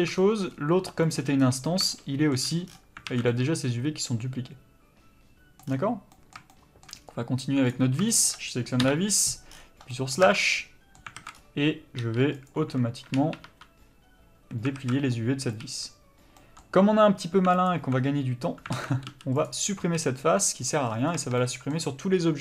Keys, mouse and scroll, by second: 0.2 shift+middle click, 0.5-1.1 scroll up 1, 1.1 click, 1.4-1.9 scroll up 1, 1.9 shift+middle click, 2.7-3.1 scroll down 1, 3.1 alt+a, 3.3 middle click, 5.7-6.1 scroll down 1, 6.1 middle click, 7.0 scroll up 1, 7.7 click, 8.1 shift+middle click, 8.8 KP_Divide, 9.5-9.9 scroll down 1, 9.9 middle click, 10.3 Tab, 10.5 middle click, 11.2 alt+a, 11.3-12.4 scroll up 1, 12.4 click, 13.5 2, 14.8 alt+a, 15.1 middle click, 15.6 3, 16.4 middle click, 17.7 alt+click, 18.7 alt+a, 19.4 c, 20.7 x, 20.8-21.2 scroll down 1, 21.2 Tab, 21.4 middle click.